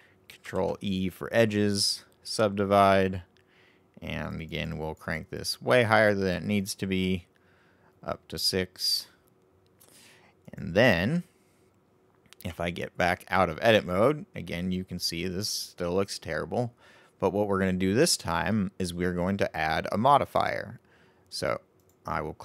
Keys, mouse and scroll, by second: 0.4 ctrl+e, 4.2-9.7 drag, 10.4 click, 12.4 Tab, 13.8-16.8 middle drag, 21.7 click.